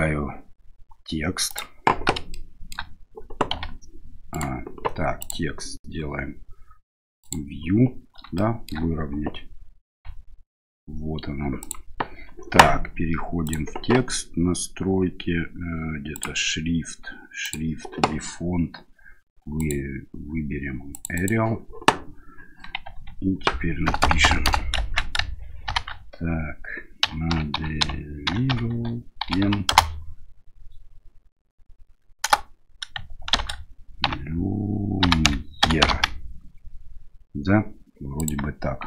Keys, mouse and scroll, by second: 2.4-2.9 shift+middle drag, 3.6 g, 5.3-7.5 drag, 8.4 shift+middle click, 10.0 g, 13.4 click, 16.2 click, 17.5 click, 22.9 Tab, 23.9 BackSpace, 24.1 BackSpace, 24.3 BackSpace, 24.5 BackSpace, 25.7 shift+v, 27.1-29.8 typing, 32.3 Return, 33.4 shift+k, 34.1 ., 35.1-36.0 typing, 38.2 click.